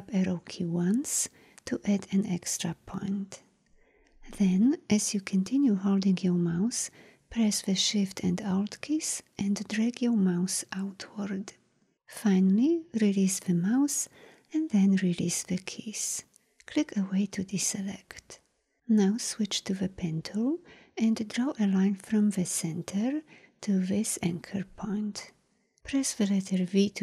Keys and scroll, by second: 19.9 p, 26.6 v.